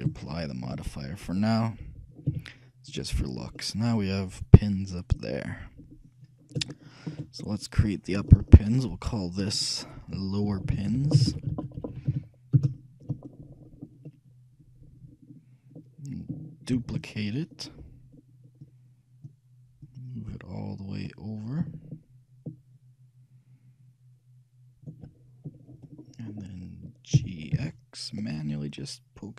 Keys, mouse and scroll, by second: 2.4 shift+z, 3.8-5.2 middle drag, 6.8-9.1 shift+middle drag, 9.5-11.6 shift+drag, 13.7-14.1 scroll down 1, 14.1 scroll up 1, 14.3-15.9 middle drag, 16.9 shift+d, 17.8-18.8 middle drag, 18.8-21.7 drag, 25.9-28.4 middle drag, 27.3 g.